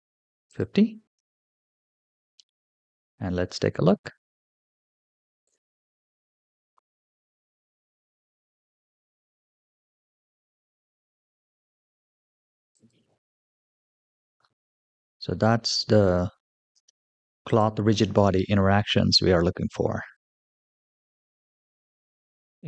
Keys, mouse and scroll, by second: 0.3-1.5 drag, 2.6-4.5 middle drag, 4.9-5.3 shift+middle drag, 5.6-6.2 scroll up 1, 6.3 shift+middle drag, 6.7 scroll down 1, 6.8-7.7 scroll up 1, 7.7 scroll up 1, 9.2 click, 9.7 space, 12.6 click, 16.6 space, 17.3 click, 17.8 space.